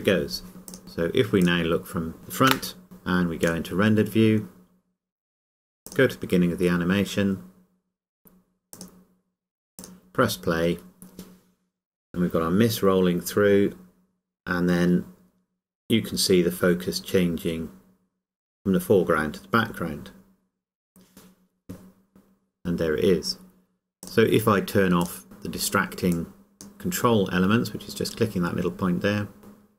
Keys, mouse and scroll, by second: 0.7 click, 2.5 KP_0, 8.7 click, 24.0 click, 28.9 scroll up 1.